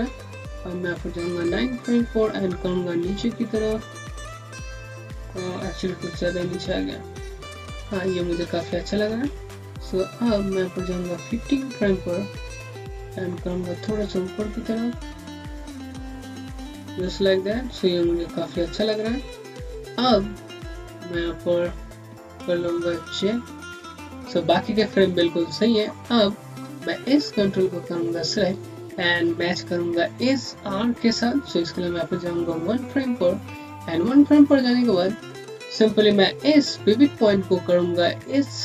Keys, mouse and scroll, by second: 1.6 click, 6.2 Up, 9.7 ., 12.9 click, 18.9 click, 19.0 scroll down 1, 19.6 scroll up 1, 20.5 typing, 22.3 typing, 23.4 typing, 27.1 typing, 27.1 click, 32.7 click, 34.1 scroll up 1, 36.7 z, 36.7 click.